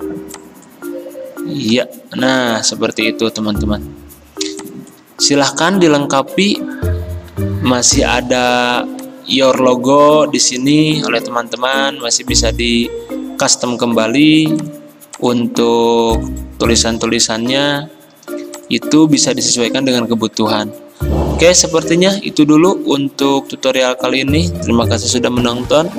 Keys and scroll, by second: 1.7 Delete, 11.1 d.